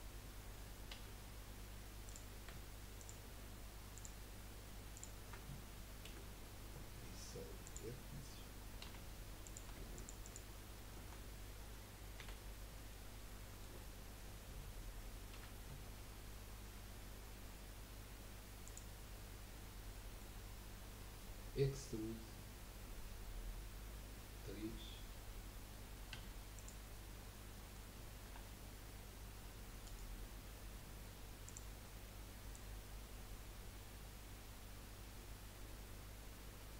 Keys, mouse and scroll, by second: 0.9 1, 2.0 click, 3.0 shift+click, 3.9 shift+click, 4.9 shift+click, 6.0 Delete, 8.8 2, 9.4 click, 9.9 alt+shift+click, 10.2 alt+shift+click, 12.2 f, 12.9-15.3 middle drag, 15.3 typing, 18.9 scroll down 3, 19.3-20.4 middle drag, 20.4 scroll up 1, 26.1 3, 26.5 click, 27.2-27.5 scroll up 1, 27.5 middle click, 28.3 e, 31.4 click, 31.8 scroll up 1, 32.5 click.